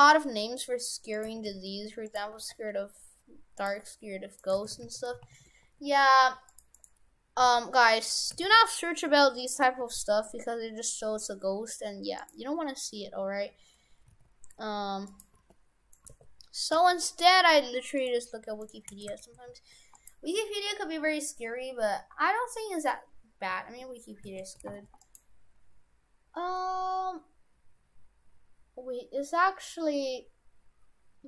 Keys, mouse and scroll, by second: 1.4 shift+f, 2.4 g, 4.4 right click, 4.6 shift+f, 6.8 right click, 7.4 s, 8.4 shift+f, 9.6 g, 14.1 s, 15.4 g, 16.1 g, 16.8 g, 18.7 right click, 19.0 shift+f, 23.5 s, 24.3 shift+f.